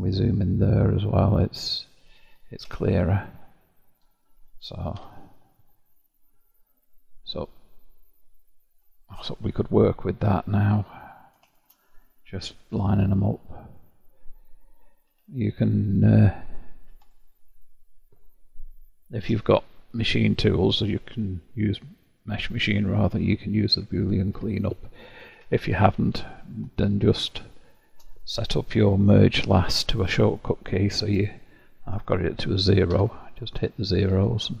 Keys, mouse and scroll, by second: 0.5-1.2 scroll up 4, 1.2-1.7 scroll down 1, 1.7-5.0 middle drag, 5.0 1, 5.8-6.5 scroll down 6, 6.5-9.3 middle drag, 9.3-11.0 scroll down 1, 11.0 click, 11.5-14.5 shift+drag, 15.9 click, 17.1-19.3 alt+drag, 19.3 y, 26.7-27.2 scroll up 1, 27.2 scroll up 1, 27.5-30.4 shift+middle drag, 30.9-32.9 drag, 32.9 0, 33.7-34.1 shift+scroll up 1, 34.1-34.6 shift+scroll down 1.